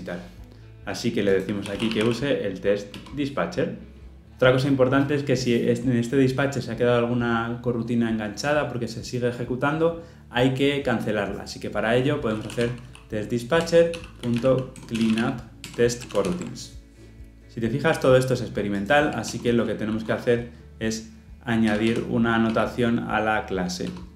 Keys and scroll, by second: 2.9 Return, 13.6 Return, 16.1 ctrl+alt+l, 16.2 ctrl+alt+o, 19.2 alt+Return.